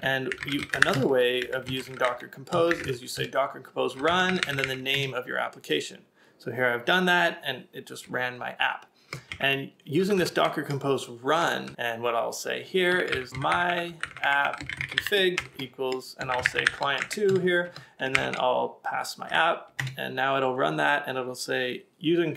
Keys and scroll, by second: 0.0-2.5 typing, 3.7-5.4 typing, 9.8 Up, 10.0 alt+Left, 10.1 alt+Left, 11.6 Left, 13.1 ctrl+a, 13.3 ctrl+a, 13.3-17.3 typing, 18.2 alt+Right, 18.6-19.4 typing, 19.8 Return.